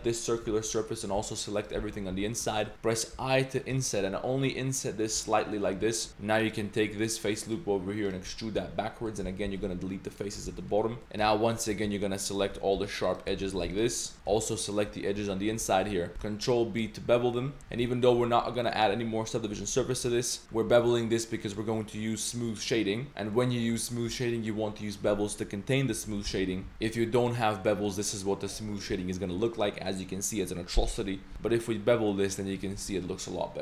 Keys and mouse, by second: 0.3 ctrl+shift+click, 0.8 click, 1.5 alt+shift+drag, 1.8 z, 2.2 z, 2.5 shift+click, 3.1 i, 5.3-5.7 drag, 5.8 click, 6.4 alt+3, 6.4 alt+click, 7.0 alt+click, 7.4 click, 8.1 click, 8.3 middle click, 8.6-11.0 typing, 10.6 middle click, 11.5 alt+shift+click, 12.3 alt+shift+click, 13.0 alt+shift+click, 13.5 ctrl+z, 14.0 alt+shift+click, 14.6 alt+shift+click, 15.2 z, 15.7 shift+drag, 16.1 ctrl+b, 17.6 z, 17.7 Tab, 17.9 drag, 18.7 middle drag, 20.7 Tab, 21.5-22.6 drag, 23.3-23.7 middle drag, 23.9 middle drag, 25.9 Tab, 26.3 ctrl+z, 26.5 ctrl+z, 26.7 Tab, 27.2 click, 28.3-28.6 middle drag, 28.9-29.5 middle drag, 31.3 ctrl+b, 32.8 Tab, 33.2-33.6 middle drag.